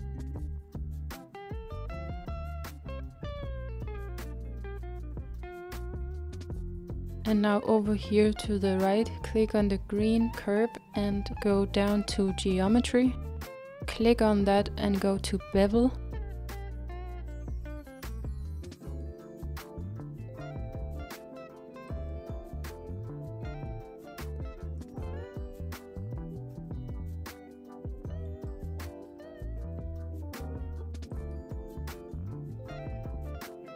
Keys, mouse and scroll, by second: 3.3-6.8 scroll down 2, 8.8-11.7 scroll up 1, 11.7 click, 12.8-13.6 scroll down 1, 15.3-17.5 drag, 17.5-19.6 scroll down 2, 19.6-22.0 scroll down 1, 22.0-23.6 scroll down 1, 23.6-33.7 drag.